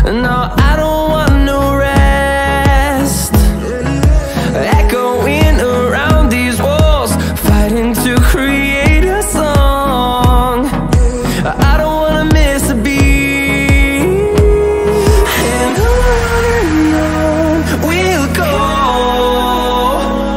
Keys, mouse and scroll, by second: 0.7-6.0 drag, 6.0 alt+scroll down 1, 6.6 scroll down 1, 6.9-7.2 scroll up 1, 8.5-13.0 drag, 13.0 scroll down 1, 13.8-18.5 drag, 18.5 alt+click, 19.1-20.3 alt+drag.